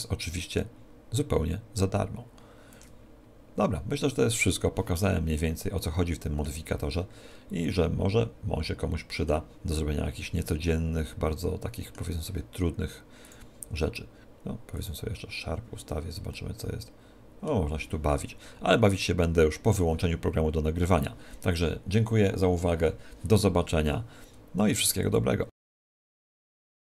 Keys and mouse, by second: 5.4-8.8 middle drag, 9.8-11.6 middle drag, 13.4-15.6 drag, 16.5-18.5 middle drag.